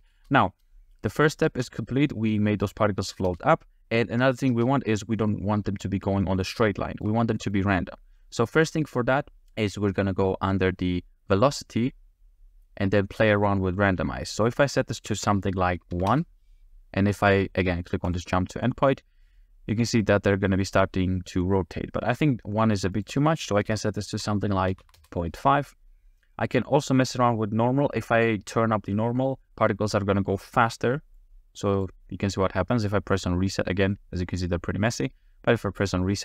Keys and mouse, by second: 0.1 space, 1.1 click, 1.5 space, 3.3 space, 4.5 space, 5.2-5.6 middle drag, 6.2-7.0 ctrl+drag, 7.0 middle drag, 7.4 middle click, 11.3 click, 14.7-16.1 drag, 18.1 click, 19.7-20.7 middle drag, 23.0-25.0 drag, 31.2 click, 35.8 click.